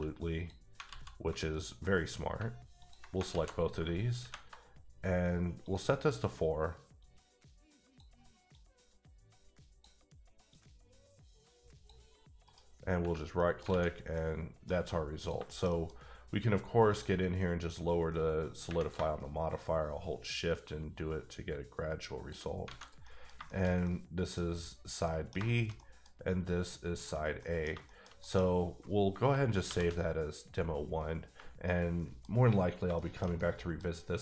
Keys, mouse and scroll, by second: 0.4 click, 0.9 alt+z, 1.8 middle click, 2.8 ctrl+click, 3.3 alt+z, 4.2 ctrl+shift+`, 5.1-5.6 scroll down 1, 5.6 click, 7.3-8.2 drag, 8.8-10.0 drag, 10.8-12.0 drag, 12.4 right click, 12.9 scroll down 1, 13.4 middle click, 13.7 a, 13.9 scroll down 3, 14.1 middle click, 14.7 scroll up 3, 15.2 click, 15.5 shift+middle click, 15.9 scroll up 2, 16.9 click, 17.7 click, 19.5 shift+click, 22.7 a, 22.8 alt+scroll down 2, 23.0 middle click, 25.0 middle click, 25.7 middle click, 26.2 scroll up 2, 27.1-27.4 scroll down 1, 27.4 middle click, 27.7 shift+middle click, 29.6 ctrl+s, 31.6 middle click, 33.7-34.0 middle drag.